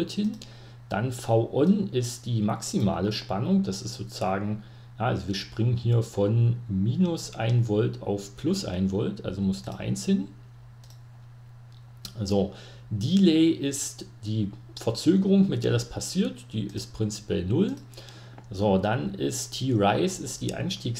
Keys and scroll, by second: 9.2 Escape, 9.4 1, 15.9-16.8 typing.